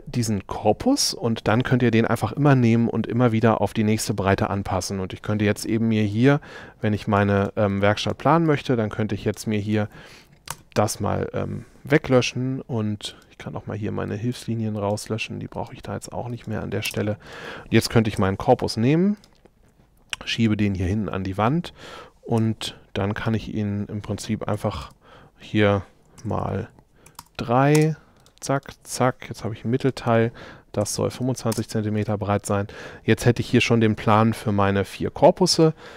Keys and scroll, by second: 10.5 BackSpace, 12.3 e, 16.9 space, 18.2 m, 22.4 m, 24.6 6, 24.9 Return, 29.4 shift+m, 30.8 2, 31.2 Return, 32.5 shift+space.